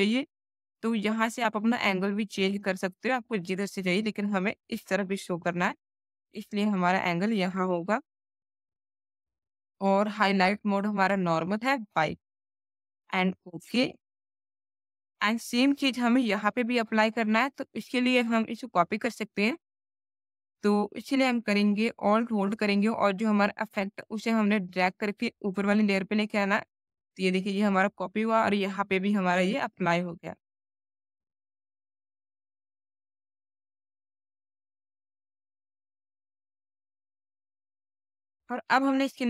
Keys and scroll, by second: 30.3 space.